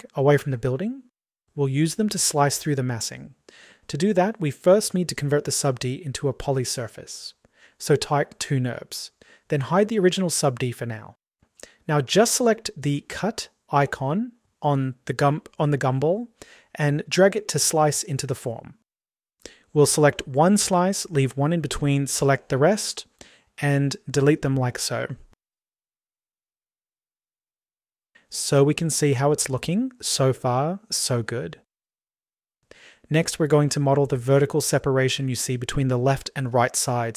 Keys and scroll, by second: 24.1 Delete.